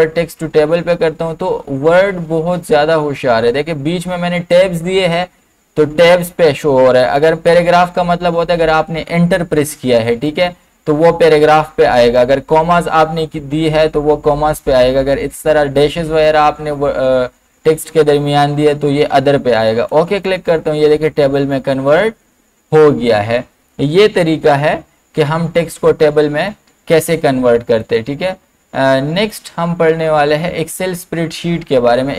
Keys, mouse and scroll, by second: 19.9 click, 25.9 BackSpace, 27.8 click.